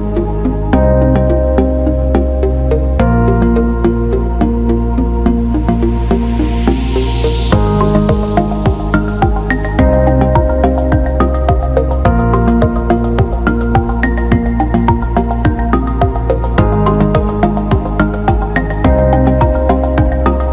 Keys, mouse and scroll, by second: 3.2-8.4 drag, 8.8 alt+middle click, 9.7 click, 10.4 click, 10.7-13.3 drag, 13.5 alt+middle click, 14.2-15.4 alt+middle drag, 16.5 click, 17.4 alt+middle click, 18.6 alt+middle click, 19.5 alt+middle click, 20.2 click.